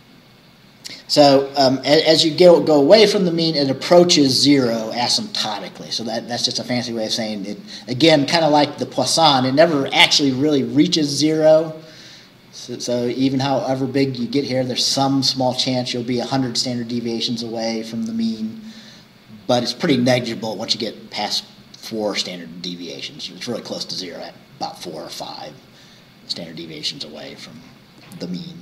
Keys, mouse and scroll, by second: 1.1-1.8 scroll down 4.